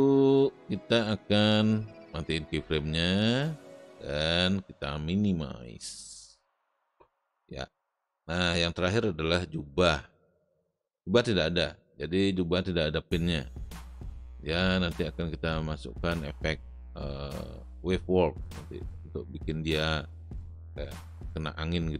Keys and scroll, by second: 13.7 space.